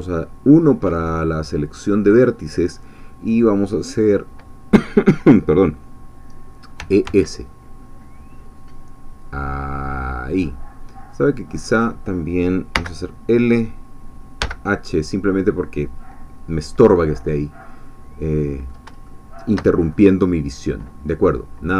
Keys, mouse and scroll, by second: 6.8 e, 7.1 s, 10.3 click, 11.8 click, 12.7 l, 14.4 h, 17.9-18.9 middle drag, 19.1-20.1 shift+middle drag.